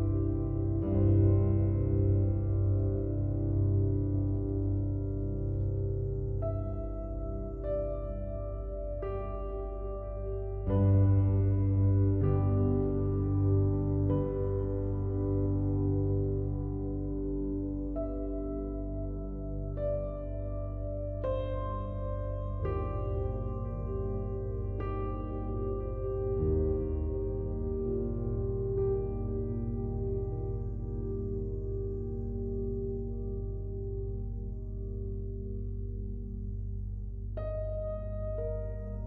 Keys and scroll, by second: 8.6 ctrl+d.